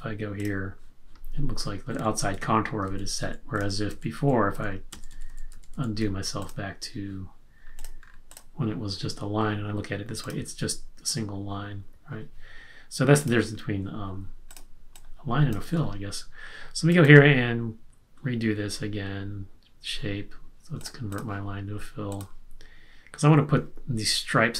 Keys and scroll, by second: 1.9 super+z, 2.9 super+z, 3.5 super+z, 4.2 super+z, 5.1 super+z, 5.7 super+z, 15.6 super+z.